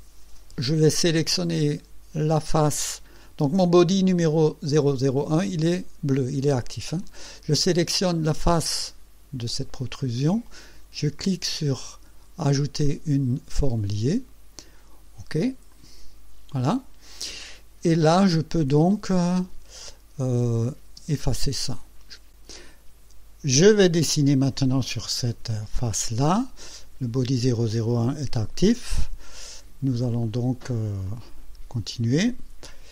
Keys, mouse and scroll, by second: 3.5 click, 7.0 click, 8.6 click, 13.5 click, 15.7 click, 19.4 click, 20.4 click, 20.9 space, 22.4 click, 23.7 click, 30.3 click, 31.1 click.